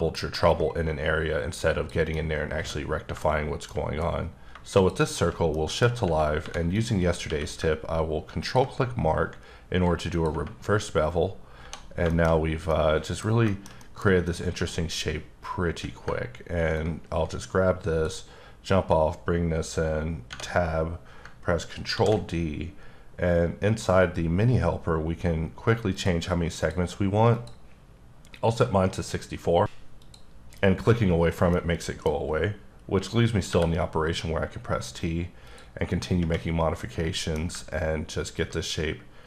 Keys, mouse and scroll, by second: 2.1 middle click, 4.8 click, 5.5 middle click, 6.4 3, 6.7 click, 7.3 q, 8.4 ctrl+click, 10.9-11.6 scroll down 3, 11.6 1, 12.0-12.4 scroll down 3, 12.1 shift+middle click, 12.7 middle click, 14.2 click, 14.5 d, 16.7 ctrl+click, 21.9 ctrl+d, 25.9 click, 26.6 click, 27.3 click, 31.8 scroll up 2, 33.2 t, 35.1 click, 36.1 scroll down 2, 36.5 middle click, 38.0 ctrl+click.